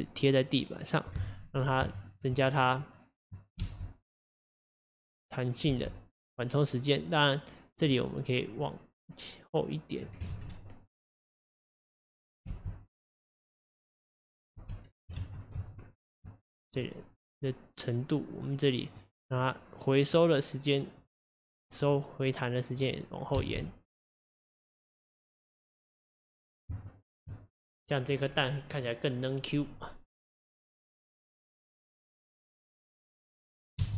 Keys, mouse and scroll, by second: 1.1-1.9 scroll down 4, 1.9-2.8 shift+middle drag, 2.8-3.6 drag, 3.6 space, 5.7 space, 6.2-10.3 drag, 10.3 ctrl+z, 10.6 click, 10.9 click, 12.1 click, 12.5 space, 14.6 space, 15.2 ctrl+z, 15.6 ctrl+z, 18.8-21.4 drag, 21.8-23.3 drag, 23.3 space, 25.1-26.0 scroll down 3, 26.9-31.1 shift+middle drag, 33.9 space.